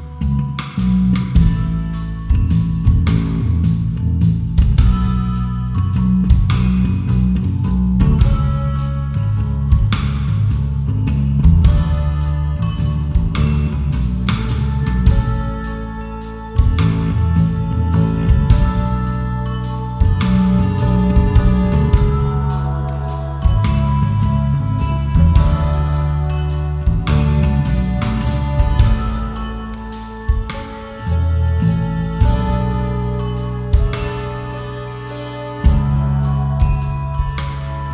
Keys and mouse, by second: 0.7-3.0 drag, 6.5 KP_1, 8.9 g, 12.1 shift+click, 14.3 click, 14.9 click, 15.2 click, 15.4 click, 15.6 click, 16.9 g, 18.6 click, 20.5 KP_1, 20.9 g, 26.0 shift+click, 30.7-31.9 drag, 32.4-33.3 drag, 36.8 Tab.